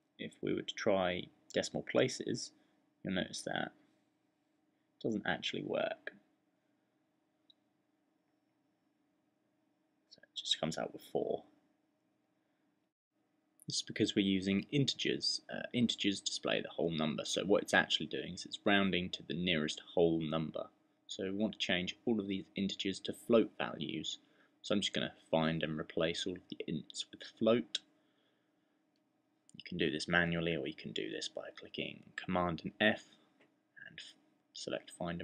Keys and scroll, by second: 0.9 typing, 2.2-2.7 typing, 4.2-5.5 typing, 6.8 typing, 7.9-8.8 typing, 22.7 super+f, 24.2-25.2 typing, 26.4-27.5 typing, 29.0-30.2 typing.